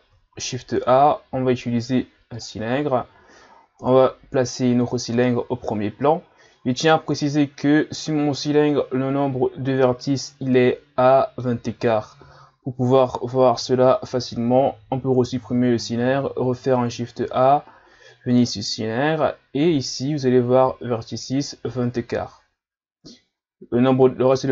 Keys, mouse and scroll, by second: 0.3 shift+a, 3.8 KP_Divide, 6.3-7.3 scroll down 1, 8.0-11.0 middle drag, 14.9 Delete, 16.4 shift+a.